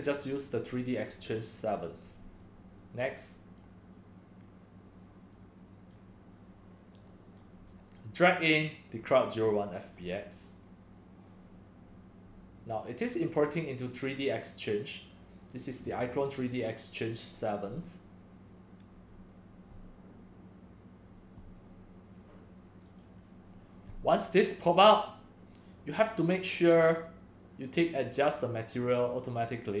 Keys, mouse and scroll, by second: 4.3 drag, 4.5 click, 5.3-6.1 drag, 6.2 click, 6.4-6.9 drag, 7.4-9.4 drag, 9.8-19.8 drag, 23.1-25.3 drag, 25.4-29.8 drag.